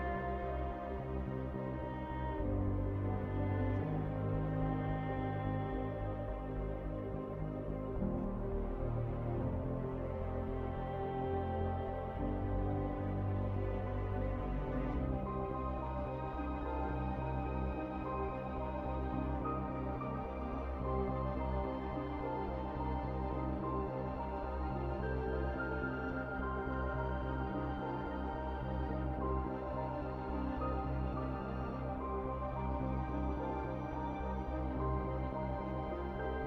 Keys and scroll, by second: 0.7-1.4 typing, 1.9 Delete, 6.7-8.7 typing, 9.8-10.5 typing, 11.5 Return, 14.5-15.2 typing, 18.3-20.9 typing, 21.0 Return, 24.3-25.3 typing.